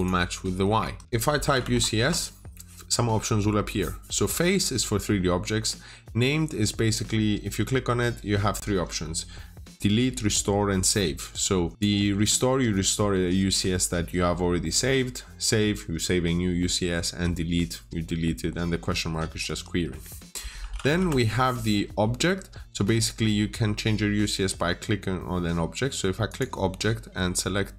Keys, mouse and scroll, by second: 0.7 Escape, 1.0 scroll up 1, 1.4 typing, 1.8 Return, 11.7 click, 19.3 Escape, 20.4 typing, 20.8 Return, 24.0-26.1 scroll down 1, 26.1 click, 26.8-27.7 scroll up 1.